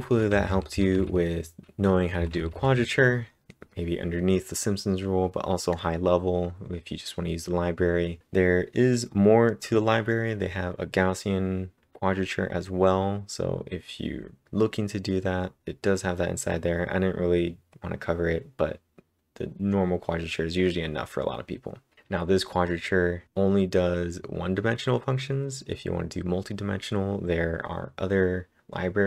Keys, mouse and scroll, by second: 0.0-1.0 typing, 2.1 j.